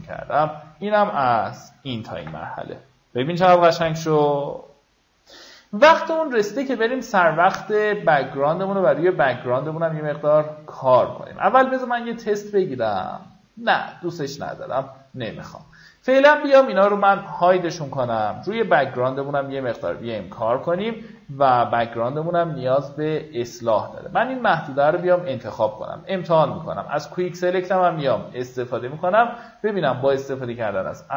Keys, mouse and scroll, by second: 1.3-2.6 alt+scroll down 1, 3.8-5.4 alt+scroll up 1, 11.3 click, 21.4 w, 22.2 click, 22.7 alt+scroll up 1, 23.3 alt+scroll up 1, 23.6 click, 25.6 ctrl+d, 26.7 shift+w, 27.5 click, 28.8 shift+w, 29.5 click, 30.4 right click.